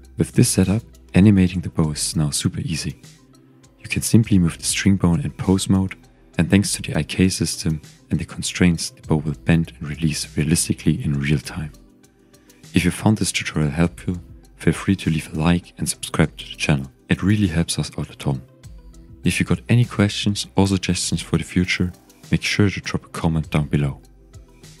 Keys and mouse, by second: 0.4 click, 2.9 g, 3.0 x, 5.4 click, 7.8 z, 9.0 z, 10.1 Tab, 10.6 ctrl+Tab, 12.6 z, 13.0 z, 13.5-13.9 drag, 15.6 ctrl+Tab, 17.0 click, 18.2 g, 18.3 x, 23.5-24.8 drag.